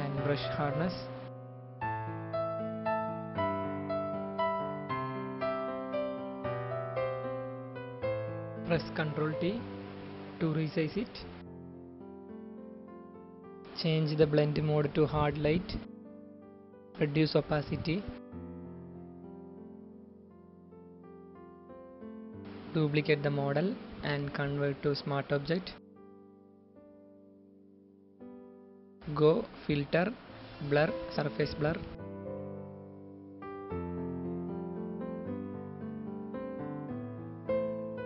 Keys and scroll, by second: 2.7-5.2 typing, 9.0 ctrl+t, 12.4 Return.